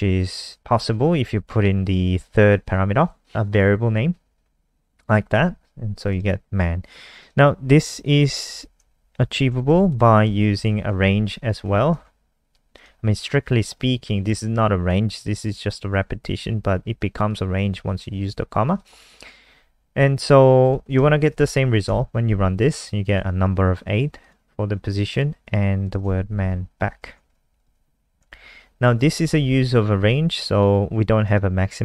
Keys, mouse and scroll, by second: 6.0 click, 7.4 scroll down 2, 8.0 click, 8.6 Down, 8.9 shift+Home, 9.0 shift+Home, 11.7 shift+Up, 11.9 shift+Tab, 12.8 click, 20.7 ctrl+s, 20.9 F5, 21.8 Return, 23.0 click, 25.4-25.8 scroll down 1, 25.8 click, 26.4 shift+Home, 26.6 shift+Home, 26.9 shift+Up, 27.3 ctrl+c, 28.3 shift+Home, 28.5 shift+Up, 28.9 ctrl+v, 30.2 click.